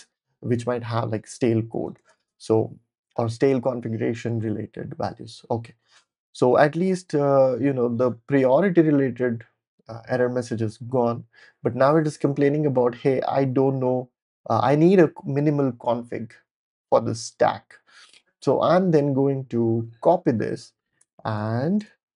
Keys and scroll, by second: 1.5-3.5 typing, 21.0 Return, 21.8-22.1 typing.